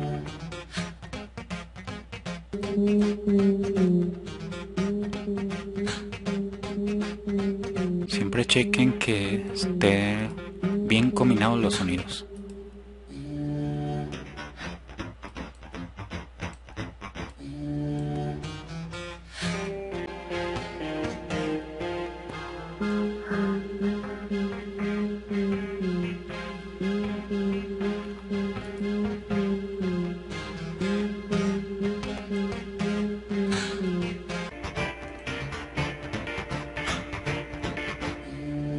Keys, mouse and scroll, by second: 2.1-3.0 drag, 7.2 click, 8.1 click, 29.3-30.7 drag.